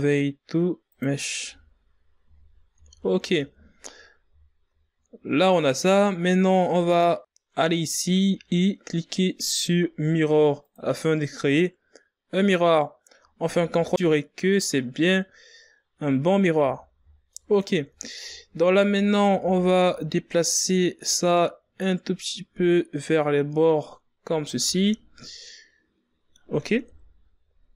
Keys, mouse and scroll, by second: 1.6 Tab, 2.3 a, 2.9 a, 3.2 scroll down 1, 3.5 Tab, 4.1-5.1 scroll down 4, 5.1-5.6 scroll up 3, 7.0 click, 7.3-10.1 drag, 13.7 ctrl+a, 19.4 z, 20.0-20.8 shift+scroll up 2, 20.9 ctrl+scroll down 2, 21.6 Tab, 22.2 a, 23.4-26.4 drag, 27.4 z.